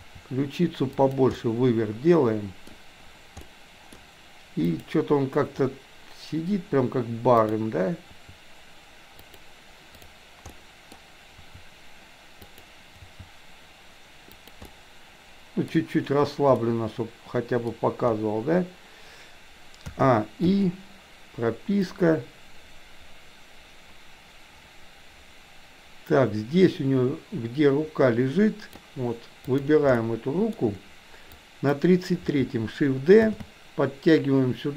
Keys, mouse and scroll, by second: 1.4-2.7 middle drag, 3.4 middle click, 4.7 click, 7.4 click, 8.1 r, 9.9 click, 10.6-10.9 middle drag, 11.3 r, 13.1 g, 14.7-15.7 middle drag, 16.7-17.7 middle drag, 19.9 a, 20.4 i, 21.9-28.8 drag, 29.6 drag, 29.9-30.6 shift+middle drag, 31.4-31.8 drag, 33.3 shift+d.